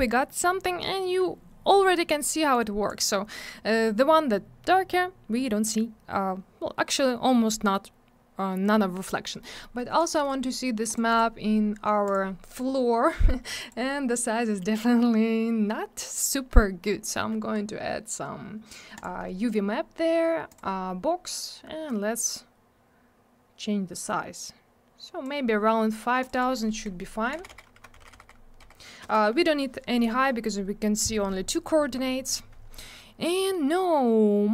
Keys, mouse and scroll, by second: 0.5-0.9 scroll up 1, 2.5 click, 7.2-7.9 scroll up 1, 8.1 scroll down 1, 9.2 middle click, 9.4 middle click, 9.6 middle click, 9.7 double middle click, 10.0 click, 10.0 click, 10.1 right click, 10.3 double right click, 10.8 click, 10.9 click, 11.1 click, 11.1 double click, 12.0 click, 12.1 click, 13.6 click, 13.7 click, 14.6 scroll down 1, 18.9 click, 19.0 click, 20.5 click, 20.5 click, 21.9 click, 26.2 click, 26.2 click, 26.3 click, 26.4 double click, 26.9 5, 27.6 Tab, 27.9 5, 29.0 Return, 33.4 scroll up 1.